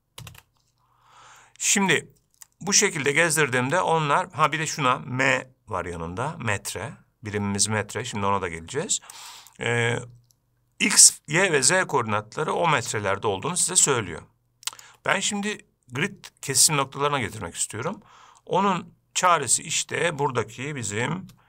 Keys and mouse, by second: 2.7-4.7 shift+drag, 9.4-15.1 shift+drag.